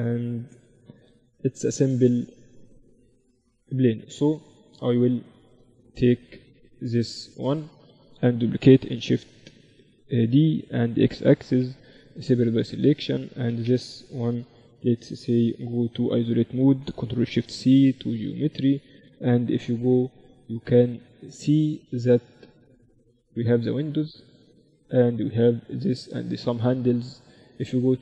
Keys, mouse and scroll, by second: 4.1-6.4 middle drag, 4.7 z, 6.4-8.4 drag, 6.8-8.2 middle drag, 6.8-8.6 right drag, 8.6 middle click, 8.9 shift+d, 11.6 p, 12.3 Tab, 12.8-14.6 right drag, 15.5 KP_Divide, 17.2 ctrl+alt+shift+c, 19.2 KP_1.